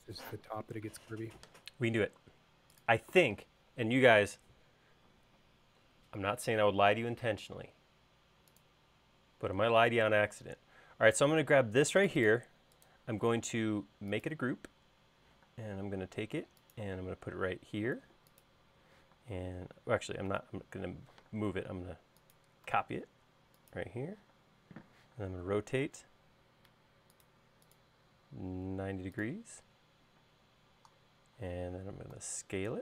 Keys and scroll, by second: 16.3 m, 20.0 q, 21.4 super+z, 26.0 q, 27.7 Up, 30.4 space, 32.2 s.